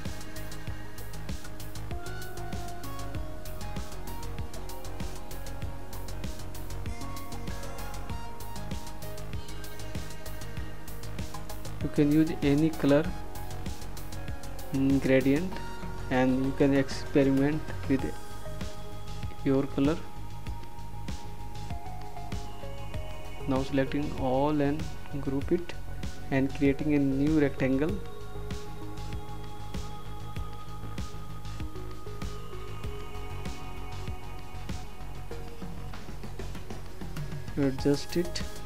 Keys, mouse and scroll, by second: 4.4 click, 14.5 click, 18.1 ctrl+a, 22.0 click.